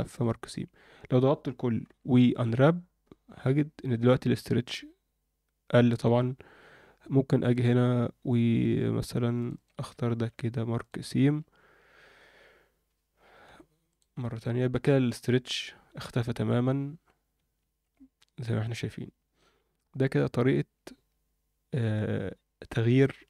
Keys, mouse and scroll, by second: 0.5 a, 1.8 u, 2.7-3.2 scroll down 2, 3.2 scroll up 1, 4.1-5.0 scroll down 1, 6.6-7.1 scroll up 2, 7.5-9.2 drag, 9.3 shift+click, 10.1 ctrl+e, 11.2 a, 13.4 u, 14.7-15.0 scroll down 1, 15.0-15.5 scroll up 2, 15.5-15.9 scroll down 2, 15.9 Tab, 16.2 Tab, 17.6 alt+a, 18.1-18.6 scroll up 2, 18.5 Tab, 18.8 Tab, 19.4-19.8 scroll down 1, 19.8-20.2 scroll up 1, 20.2 a, 21.9-23.2 drag.